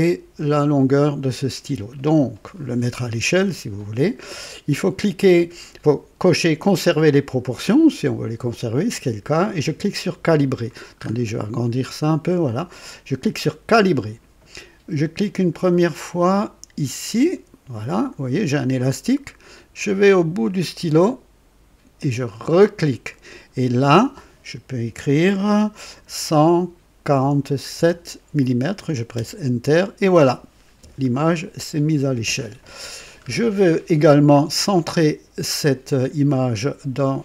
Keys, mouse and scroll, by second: 10.9-11.3 scroll up 3, 11.5-11.8 scroll down 2, 13.7 click, 17.1 click, 22.2 click, 26.1-27.9 typing, 29.1 KP_Enter, 29.7 typing, 32.7-33.2 scroll down 2, 34.0 scroll up 2, 34.6 right click, 35.4 right click.